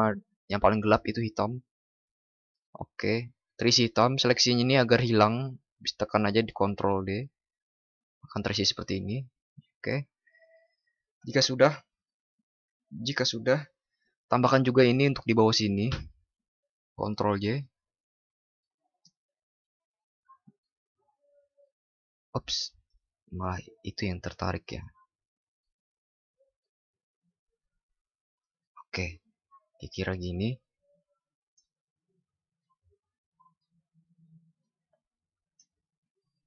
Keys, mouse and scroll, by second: 7.2 ctrl+d, 17.3 ctrl+j, 23.4 ctrl+z, 30.6 ctrl+t.